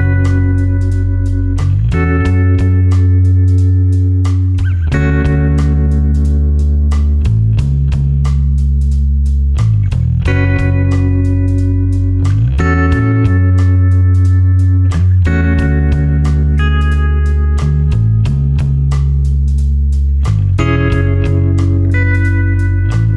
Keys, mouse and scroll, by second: 0.8 space, 0.9 click, 1.5 ctrl+click, 2.8 ctrl+click, 4.4 ctrl+alt+click, 7.3 click.